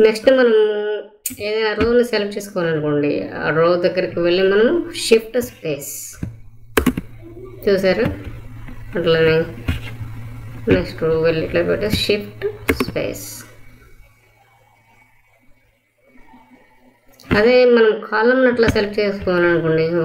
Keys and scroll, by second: 6.7 shift+space, 12.6 shift+space.